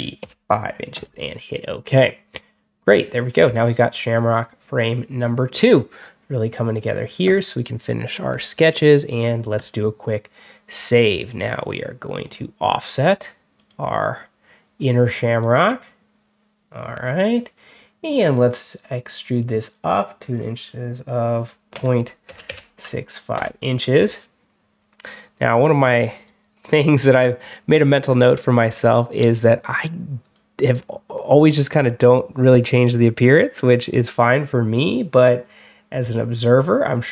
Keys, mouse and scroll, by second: 0.1 5, 0.8 Return, 7.1 click, 8.2 click, 9.4 click, 11.2 click, 13.4 click, 15.3-17.6 drag, 19.3-20.2 drag, 21.4-22.8 typing, 23.2 Return, 26.0 click, 26.5 click, 27.8 click, 28.8 click, 29.5 click, 30.1 click, 30.5 right click, 33.6 click, 36.2 scroll down 1.